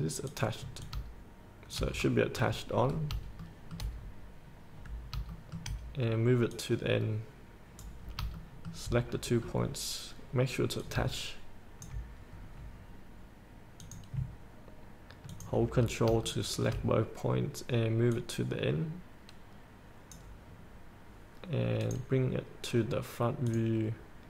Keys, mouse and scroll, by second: 0.5 click, 2.2 scroll up 1, 3.6 shift+middle click, 4.2-4.5 scroll up 1, 5.5 shift+middle click, 6.7 click, 8.2 scroll up 1, 8.7 shift+middle click, 9.4-9.8 scroll down 1, 11.1 click, 12.7-14.0 scroll up 1, 14.0 click, 15.5 ctrl+click, 16.0 scroll up 1, 16.7 shift+middle click, 17.2-18.3 scroll up 1, 18.3-20.7 drag, 20.7-22.0 scroll down 1, 22.0 click.